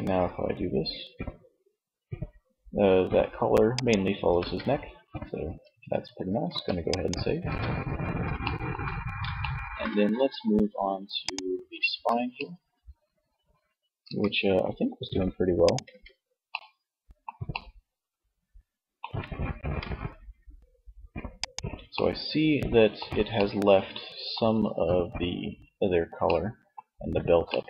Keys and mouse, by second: 3.7 ctrl+z, 4.6 Tab, 5.4 ctrl+s, 6.5 Tab, 13.2 r, 15.2 ctrl+z, 15.8-16.9 drag, 18.8 r, 20.9-22.5 middle drag, 22.7 middle click, 24.5 middle click, 26.1 middle click.